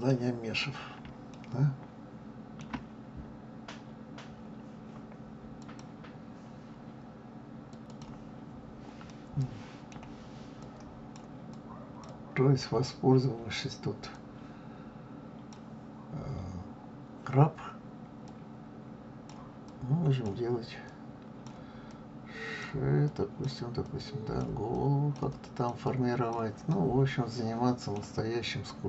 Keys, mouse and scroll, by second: 0.5-1.3 scroll up 1, 1.3-3.6 shift+middle drag, 3.6-4.6 scroll down 1, 4.6-5.5 scroll down 1, 5.5-6.6 scroll down 1, 7.9 click, 9.0-10.5 middle drag, 10.5-17.0 drag, 18.1-26.6 drag, 26.6-28.6 middle drag, 28.6-28.8 drag.